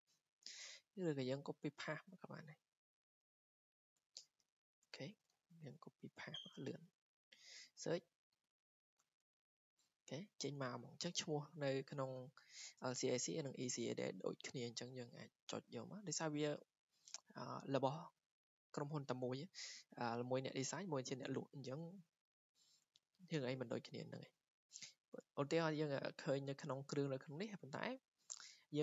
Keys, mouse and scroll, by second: 1.0 click, 2.5 click, 2.7 click, 4.7 click, 4.9 ctrl+c, 5.2 click, 6.4 ctrl+v, 7.4 click, 12.4 click, 15.5 click.